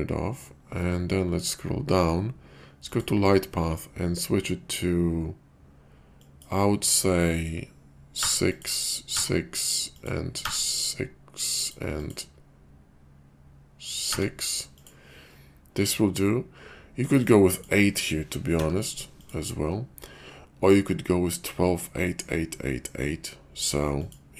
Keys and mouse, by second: 2.9 click, 6.2-8.6 drag, 8.8 click, 9.9-11.7 drag, 12.0-14.8 drag, 17.2 click, 17.5-19.3 drag, 24.1-24.3 drag.